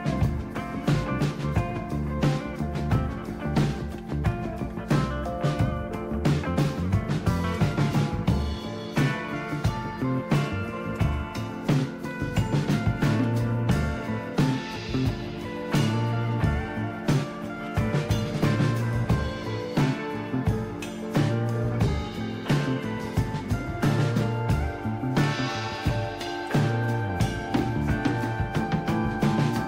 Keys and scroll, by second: 3.6-5.3 typing, 6.8-9.3 typing, 11.0-13.1 typing, 14.4-18.6 typing, 21.6 typing, 23.9 typing, 25.2 typing.